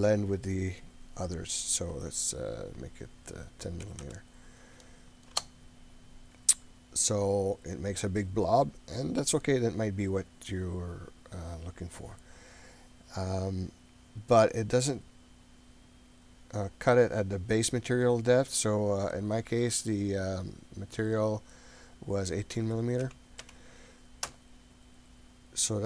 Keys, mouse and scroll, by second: 1.1-6.6 drag, 7.2-7.7 scroll down 3, 9.6-10.5 scroll up 2, 10.6-11.1 scroll down 1, 11.1-11.4 scroll up 1, 17.0-25.1 drag, 25.6-25.8 middle drag.